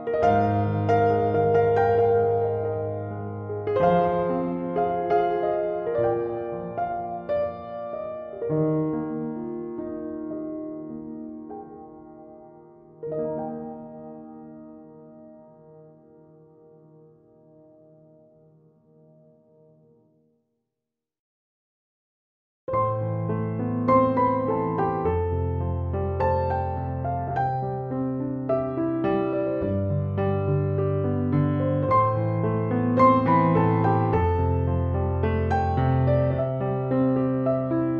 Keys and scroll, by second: 4.7 BackSpace.